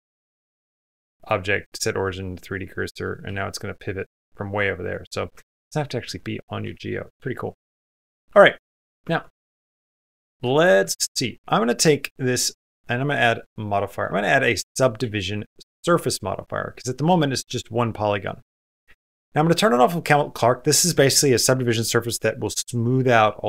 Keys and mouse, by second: 0.1 click, 1.0-2.3 drag, 2.6 middle click, 3.2 r, 5.1 middle click, 5.4 ctrl+z, 5.9 ctrl+z, 6.4 ctrl+z, 7.0 ctrl+z, 7.8 Escape, 8.2 shift+middle click, 8.9 Tab, 9.3 shift+middle click, 9.9 middle click, 10.4 click, 13.9-15.6 drag.